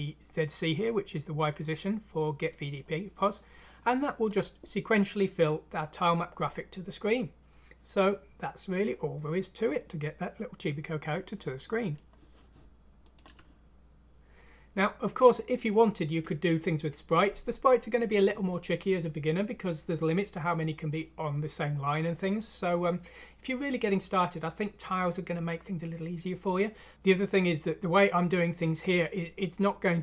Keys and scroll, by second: 13.4 ctrl+alt+!.